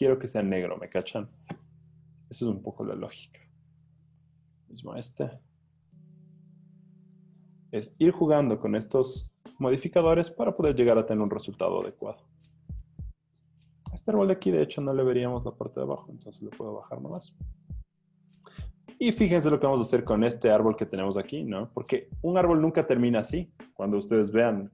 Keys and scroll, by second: 3.1 super+l, 14.3 v, 14.6 Page_Down, 14.8 Page_Down, 15.0 Page_Down, 15.1 Page_Down, 19.1 v, 22.4 z.